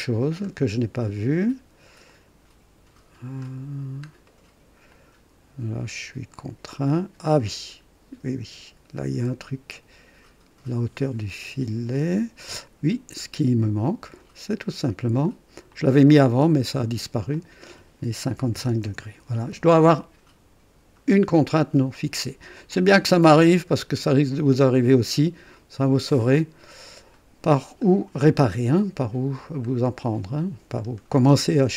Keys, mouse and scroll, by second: 0.2 scroll up 1, 2.0 click, 3.4-4.1 scroll up 1, 4.2 right click, 4.9 click, 6.3-12.5 drag, 12.9 scroll down 1, 14.6 click, 15.7 click, 17.3 click, 18.4 KP_5, 18.8 Return, 21.3 scroll down 2, 22.6-27.2 drag, 27.8 scroll up 2, 28.2-28.6 scroll down 2, 29.3 scroll down 1, 29.8 right click, 30.8-31.1 scroll up 1.